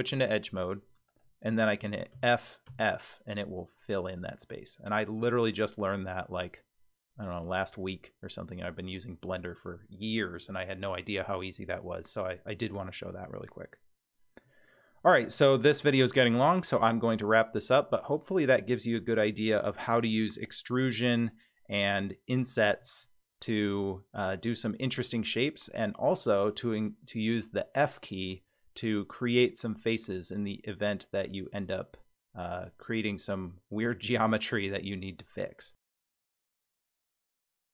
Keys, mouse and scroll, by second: 1.1 click, 2.1 f, 2.7 f, 8.7-9.7 middle drag, 14.4-15.3 middle drag, 15.6 Tab, 16.4-18.7 middle drag, 23.7-25.9 middle drag, 28.8-29.8 middle drag, 31.3-33.1 middle drag.